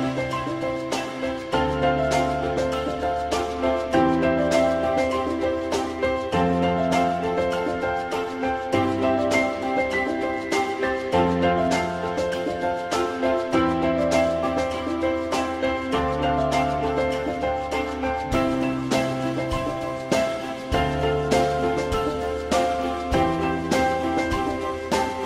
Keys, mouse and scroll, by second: 0.5 click, 7.6 alt+middle click, 11.5 alt+middle click, 18.8 alt+middle click, 22.8 alt+middle click.